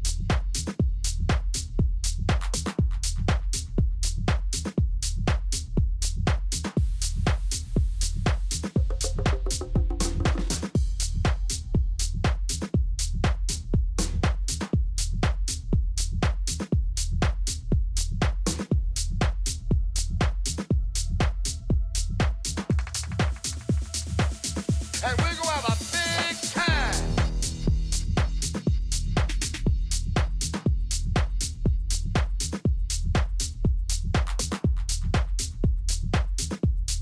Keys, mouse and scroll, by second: 2.8 n, 3.4-7.5 middle drag, 4.7 Tab, 5.3 z, 7.5 click, 8.0 a, 8.3-10.1 right drag, 8.7 click, 8.7-10.1 middle drag, 10.1-11.5 drag, 12.4 Delete, 15.4-17.3 middle drag, 16.1 a, 16.4 a, 17.4-19.3 right drag, 19.4 click, 19.8 a, 20.1 a, 23.0 ctrl+f, 26.8 F6, 29.2 Escape, 30.9-32.9 middle drag, 31.7 Tab, 34.8 KP_3, 36.1 KP_1, 36.9 z.